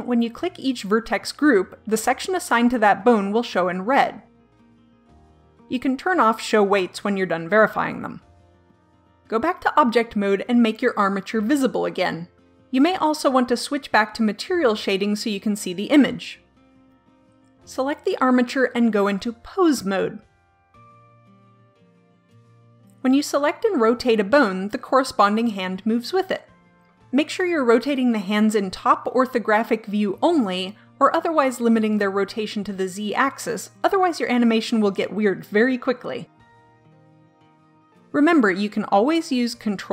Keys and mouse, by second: 0.4-3.9 drag, 6.4-8.1 drag, 10.3 Tab, 12.1 click, 13.9-15.9 drag, 18.7 click, 19.9-21.3 drag, 21.6 KP_7, 21.8 KP_5, 23.1-24.8 drag, 24.4 r, 31.1 middle click, 34.0 r.